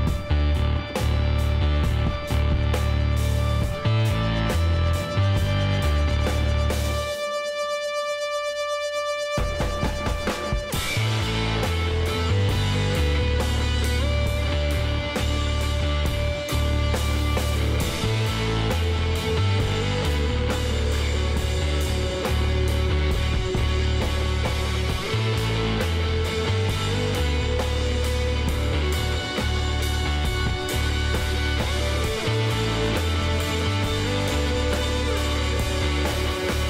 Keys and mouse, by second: 1.7 a, 2.8 Tab, 3.0-4.1 middle drag, 5.1 a, 6.0 w, 8.1 Tab, 8.4-11.0 middle drag, 8.7 a, 14.6-16.8 middle drag, 16.0 shift+s, 19.7 middle click, 20.8-22.6 drag, 22.8 Tab, 23.4 KP_1, 24.0 z, 27.3 click, 27.5 click, 27.7 middle click, 29.1 b, 29.4 click, 30.1 middle click, 33.3 click, 34.1 z, 35.8 p.